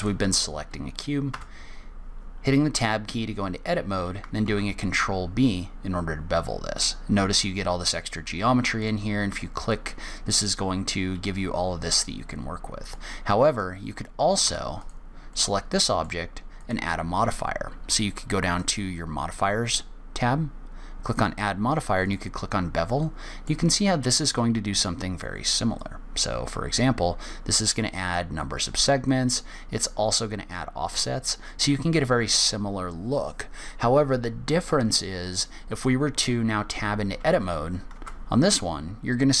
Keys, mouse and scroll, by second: 0.3 click, 1.6 Tab, 4.8 ctrl+b, 13.2 click, 13.8 click, 14.8 Tab, 15.2 click, 15.7 shift+middle click, 16.9 click, 21.5 click, 23.3 middle click, 24.0-24.5 scroll up 1, 26.1 click, 29.4 click, 37.1 e, 38.3 Tab.